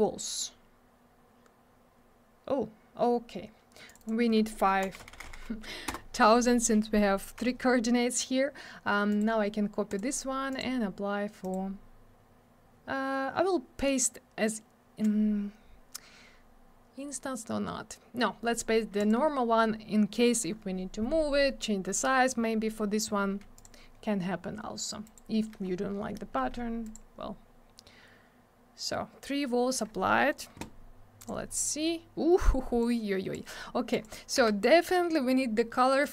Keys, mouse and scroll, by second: 3.9 click, 3.9 click, 4.0 click, 4.1 double click, 4.8 5, 5.9 Return, 9.1 right click, 9.2 right click, 9.9 click, 10.0 click, 10.5 click, 10.6 click, 11.4 right click, 11.5 right click, 19.0 click, 19.1 click, 23.5 click, 23.6 click, 25.0 right click, 25.2 right click, 26.9 click, 26.9 click, 31.2 click, 31.3 click, 32.8 click, 33.9 click, 34.0 click, 34.4 m, 36.0 click.